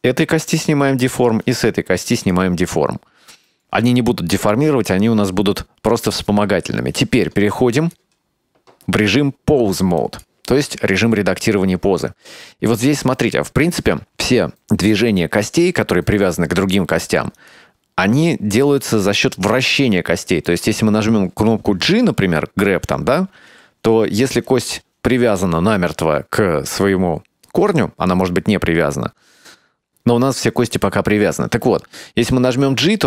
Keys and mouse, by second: 0.3 click, 1.2 right click, 2.3 click, 7.8-10.3 drag, 11.5-14.4 middle drag, 17.5 right click, 19.7-20.6 middle drag, 23.6 g, 32.2 g.